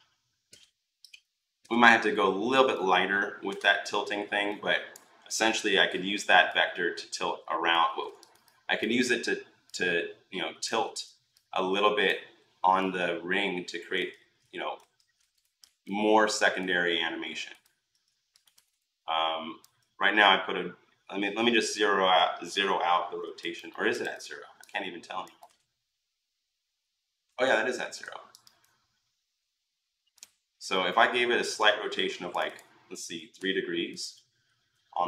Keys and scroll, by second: 0.3 ctrl+z, 1.4 ctrl+z, 5.4 r, 7.7 ctrl+z, 10.6 ctrl+z, 14.0 ctrl+z, 14.7 ctrl+z, 33.2 3.